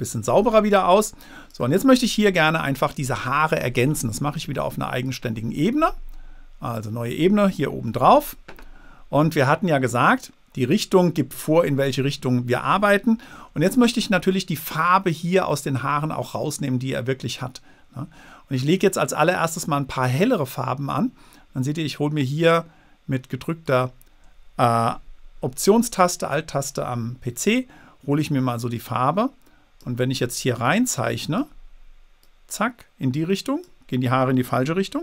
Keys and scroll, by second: 0.6 space.